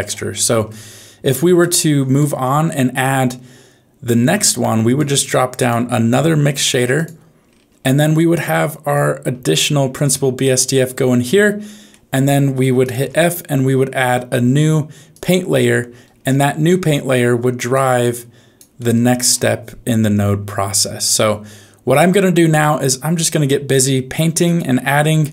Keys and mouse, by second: 0.4 middle click, 1.6 click, 1.8 click, 2.9-4.9 drag, 5.5 click, 6.1 shift+d, 7.8 middle click, 9.3 shift+a, 11.9 middle click, 12.8 click, 13.0 f, 16.7 middle click, 17.7 click, 18.9 middle click, 22.6-23.7 drag, 24.4 click, 24.9 x.